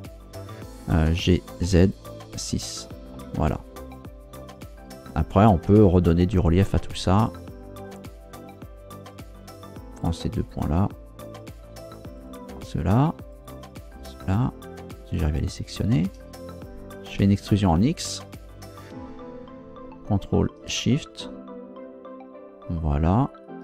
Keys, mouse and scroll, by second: 1.2 g, 1.6 z, 2.4 6, 3.1 Return, 10.0 shift+right click, 10.5 shift+right click, 11.5 shift+right click, 12.2 shift+right click, 13.3 shift+right click, 13.9 shift+right click, 15.0 shift+right click, 15.6 shift+right click, 17.4 e, 17.7 x, 23.3 ctrl+shift+click.